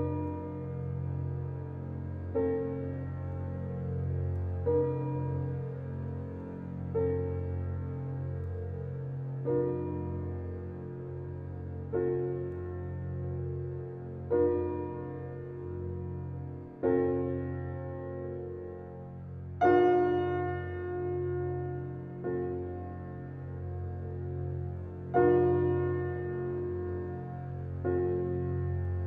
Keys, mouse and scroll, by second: 0.1-0.6 scroll up 4, 0.6-1.0 scroll down 2, 1.0 Tab, 1.5 Tab, 3.2 p, 3.7 Tab, 4.0 click, 4.3 click, 4.6 click, 5.1 click, 7.0 g, 10.2 click, 10.6 click, 12.0-14.9 drag, 15.8 click, 16.7 Tab, 17.0 click, 18.0 shift+d, 20.5 p, 20.8 Tab, 21.1 click, 21.9 click, 23.3 click, 23.7 click, 23.9-24.3 scroll down 3, 24.3 click, 27.2 scroll up 4, 27.7-28.5 shift+middle drag, 28.5 click.